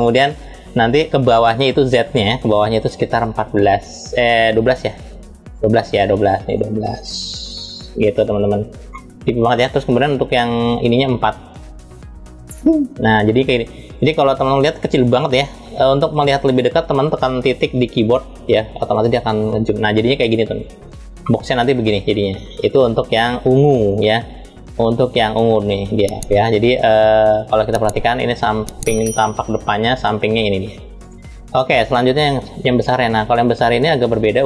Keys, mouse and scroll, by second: 5.3 click, 6.2-7.8 drag, 8.6-10.6 middle drag, 10.6-12.3 drag, 13.5 click, 14.3 click, 18.1 KP_Decimal, 19.5-19.9 scroll down 2, 20.9-22.4 middle drag, 22.4-22.7 scroll down 2, 30.8 click, 31.7-32.6 scroll down 3, 33.7-34.4 scroll down 1.